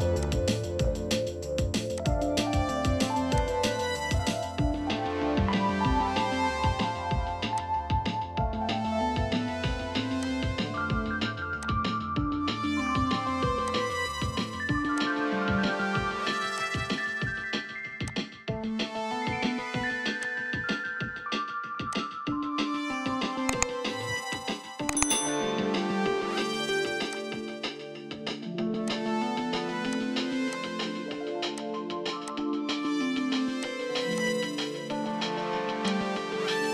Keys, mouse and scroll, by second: 4.6 Escape, 4.8 Escape, 21.5 Escape, 21.7 Escape, 24.4 ctrl+click, 28.3 right click, 31.6 ctrl+click, 35.0-36.7 scroll up 1.